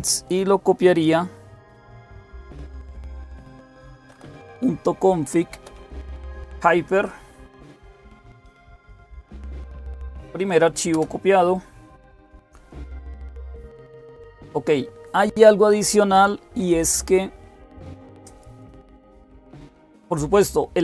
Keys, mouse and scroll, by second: 1.5 typing, 2.6-6.1 typing, 10.7 Return.